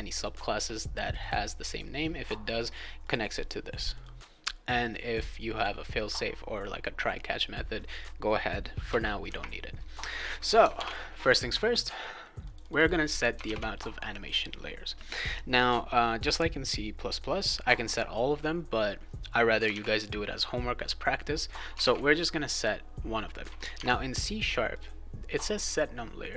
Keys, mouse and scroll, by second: 0.1 click, 1.0 click, 1.2 click, 3.0 click, 3.2 click, 3.9 click, 8.8 Return, 10.7 alt+Tab, 12.4 click, 12.6 click, 12.7 click, 13.4 alt+Tab, 19.7 alt+Tab, 21.8 alt+Tab, 23.7 alt+Tab, 24.7 click.